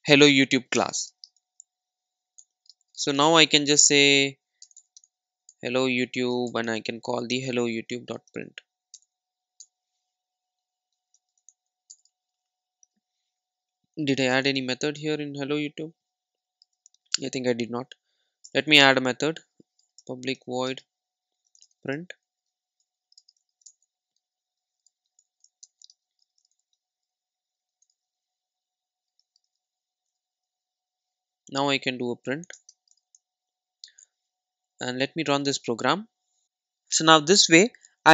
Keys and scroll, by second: 0.9 Return, 14.4 super+b, 25.1 Tab, 28.6 Tab, 29.4 super+s, 29.6 super+e, 32.9 Return.